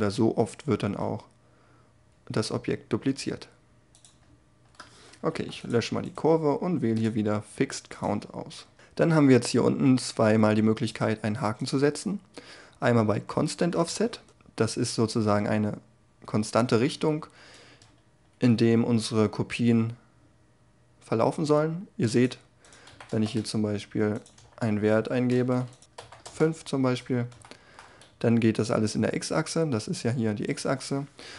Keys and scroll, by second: 0.3 s, 23.1 Return, 24.3 2, 25.0 5, 25.3 Return, 25.9 5, 26.2 Return.